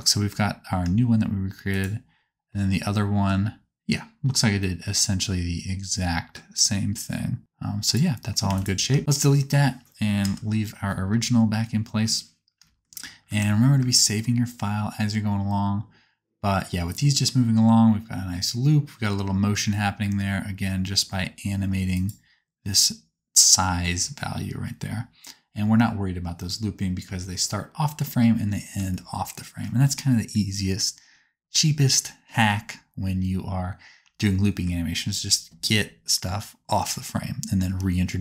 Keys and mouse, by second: 1.5-9.0 drag, 1.5 right click, 7.8 right click, 8.4 x, 10.2 KP_0, 11.1 space, 13.1 space, 13.4 ctrl+s, 13.7 space, 19.3 space, 21.9-24.1 drag, 21.9-24.1 middle drag, 21.9-24.1 right drag, 23.7 space, 27.1 space.